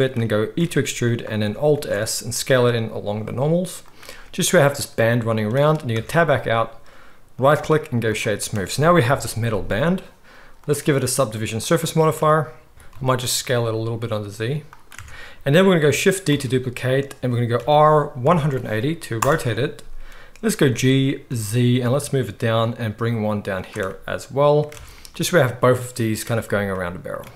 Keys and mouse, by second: 0.6 e, 1.7 alt+s, 5.9 Tab, 7.3-10.6 drag, 9.0 KP_1, 10.6-14.8 middle drag, 12.7 Tab, 12.7-15.5 drag, 12.7-14.8 right drag, 12.7 a, 12.7 s, 14.9 Tab, 15.5-24.7 right drag, 16.3 shift+d, 20.6 g, 24.7 alt+a, 24.7-27.3 alt+drag.